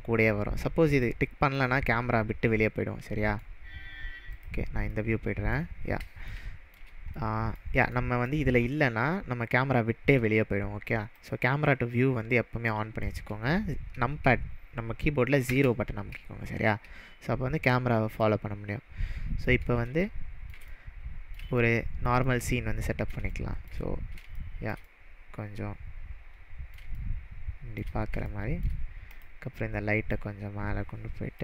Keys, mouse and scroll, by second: 1.0 click, 1.7-3.4 middle drag, 4.6 click, 5.0-5.8 middle drag, 5.8-6.2 scroll down 4, 6.3-6.9 shift+middle drag, 8.9-9.6 scroll up 2, 9.6-10.0 scroll up 2, 11.2 click, 15.5 KP_0, 18.2 click, 18.3-19.4 middle drag, 23.9-24.3 scroll down 3, 24.4-27.9 shift+middle drag, 29.2 click, 30.2-31.4 click.